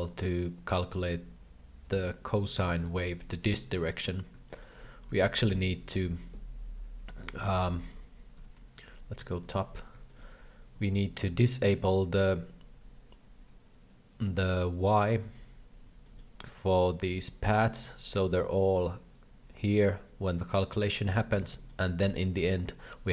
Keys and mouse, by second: 1.0 click, 2.1 click, 2.9 shift+middle click, 3.4 shift+middle click, 4.0 alt+a, 4.5 shift+middle click, 5.4 shift+middle click, 8.4 KP_7, 9.4 shift+middle click, 10.0 shift+middle click, 13.1 click, 13.7 click, 14.1 click, 14.8 click, 16.0 shift+middle click, 16.8 click, 18.1 click, 19.1 click, 20.1 click, 20.8 click, 21.6 shift+middle click, 22.0 shift+middle click.